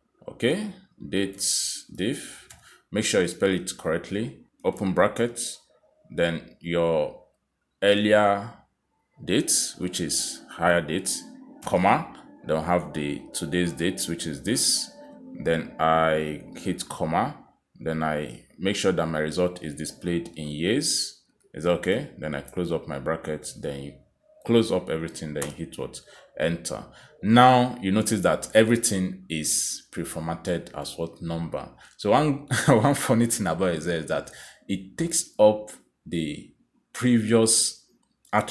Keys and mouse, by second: 0.3-1.9 typing, 5.7-6.1 typing, 9.2 click, 9.2 shift+9, 11.5 ,, 13.3 click, 19.2 shift+', 20.8 y, 21.6 shift+', 22.8 shift+0, 26.5 Return, 31.9 click, 34.2 click, 35.7 click.